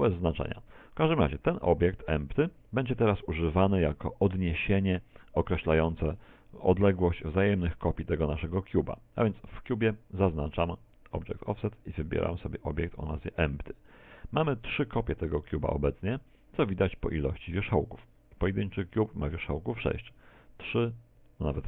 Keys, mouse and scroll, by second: 1.3 click, 6.6 right click, 7.6 z, 8.4 middle click, 11.3 click, 18.4 Tab, 20.1 Tab.